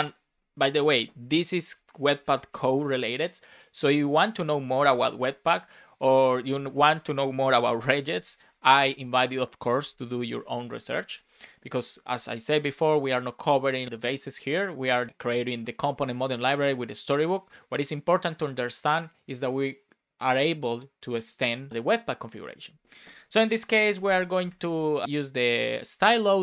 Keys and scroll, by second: 0.6 BackSpace, 7.8 shift+4, 8.2 Right, 9.1 Return, 10.3 BackSpace, 10.7 shift+;, 11.0 space, 12.0 Return, 24.0 space, 25.0 BackSpace.